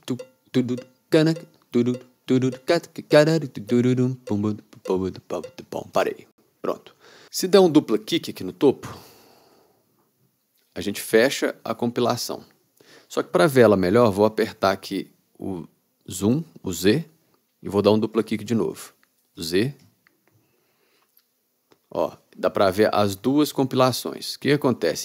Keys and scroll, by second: 6.1 space, 16.3 z, 19.4 z.